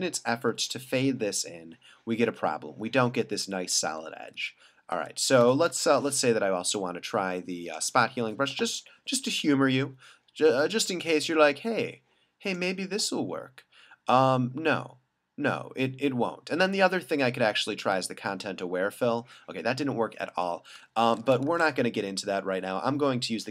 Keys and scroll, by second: 4.3 alt+super+z, 4.9 alt+super+z, 6.4 super+d, 9.0 ], 20.3 super+z, 21.5 super+d.